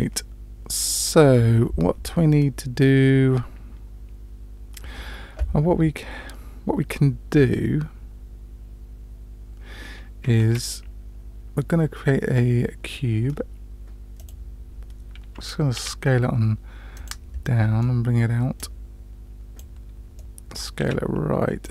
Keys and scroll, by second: 10.4 shift+a, 15.8 s, 20.8 s.